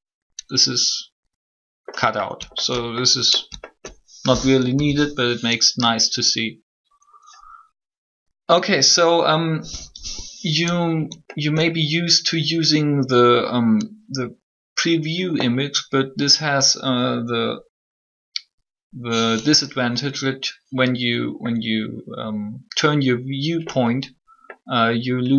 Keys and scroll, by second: 4.7 alt+3.